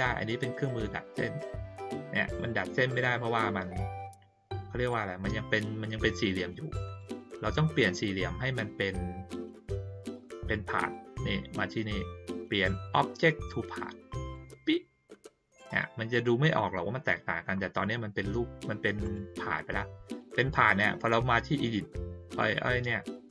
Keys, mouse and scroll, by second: 0.4 click, 2.9-4.8 drag, 6.8 click, 10.7 click, 14.3 click, 19.0 click.